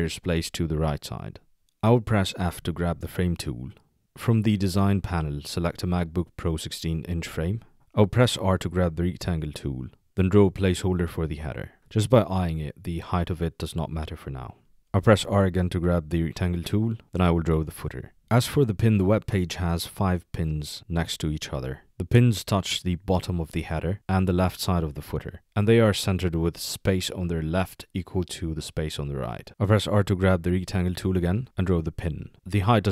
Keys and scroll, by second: 2.4 f, 8.4 r, 15.4 r, 29.5 r.